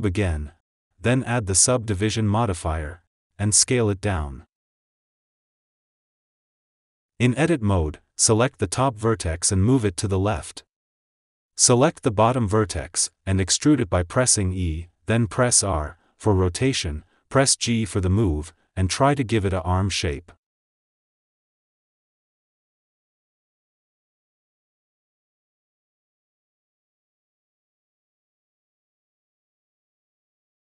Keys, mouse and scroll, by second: 3.1 click, 3.4 s, 4.3 g, 5.4 click, 5.7 g, 7.6 Tab, 8.5 click, 9.8 g, 11.5 click, 11.7 click, 14.3 e, 15.5 ctrl+z, 15.7 r, 17.3 g, 19.3 s, 21.0 click, 21.1 g, 22.1 click, 22.2 g, 23.5 click, 23.7 g, 25.3 click, 25.9 r, 27.7 click, 28.3 g, 29.7 click.